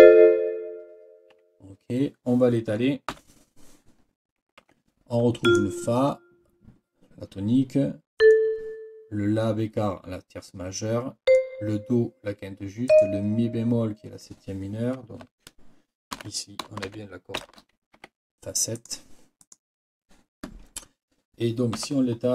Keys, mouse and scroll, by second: 3.1 n, 4.6 Escape, 5.4 click, 8.2 click, 11.2 click, 12.9 click, 16.2 ctrl+k, 16.9 shift+f, 18.0 shift+Escape, 18.8 click, 19.4 click, 21.8 n.